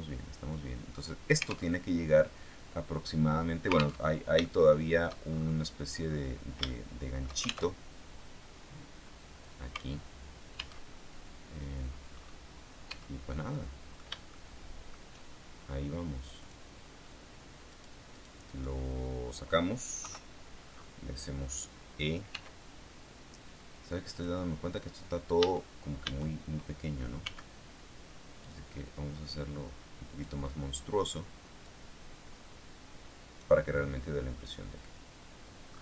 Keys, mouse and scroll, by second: 1.6 alt+Tab, 4.0 alt+Tab, 4.4 shift+middle click, 6.6 shift+middle click, 7.6 alt+shift+Tab, 10.8 alt+Tab, 11.8-12.9 scroll up 4, 12.8 Tab, 13.4 middle click, 14.2 shift+middle click, 16.3 click, 18.0 right click, 18.6 right click, 19.9 KP_3, 22.2 e, 24.0 click, 25.3 a, 27.1 s, 28.3 click, 29.2-30.3 drag, 31.6-33.5 drag, 33.5-34.4 scroll down 2, 34.6-35.3 scroll down 2.